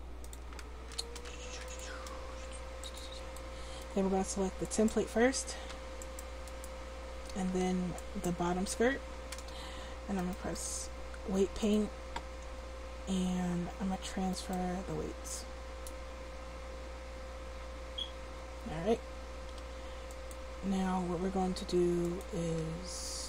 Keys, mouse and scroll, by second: 4.7 middle click, 4.7 right click, 10.3 click, 16.0-17.7 drag, 20.1-23.2 drag.